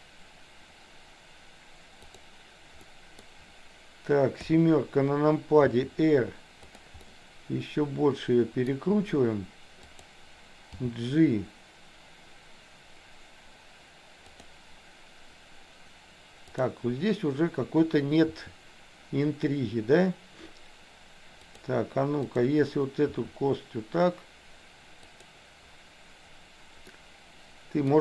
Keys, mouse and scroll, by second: 2.1 click, 2.9 middle click, 4.4 KP_7, 5.8 r, 7.0-8.7 middle drag, 9.9 click, 10.7 g, 16.6 click, 18.4 r, 22.4 click, 23.1 r, 26.8-28.0 middle drag.